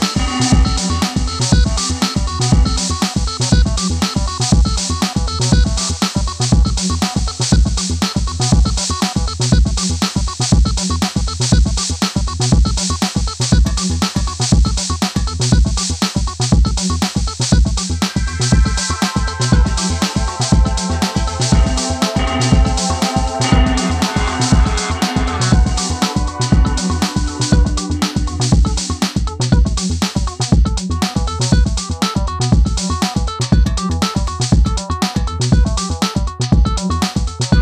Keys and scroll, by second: 10.2-11.0 typing, 17.8 Return, 21.5 Delete, 24.7-25.6 typing, 31.4 Return, 34.5 Delete.